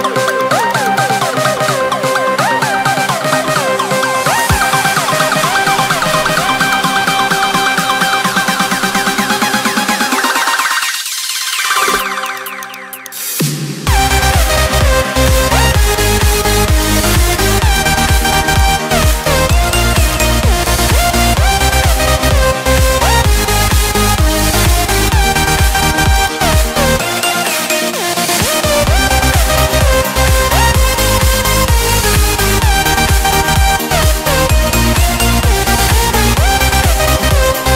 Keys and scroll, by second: 14.6-14.9 typing.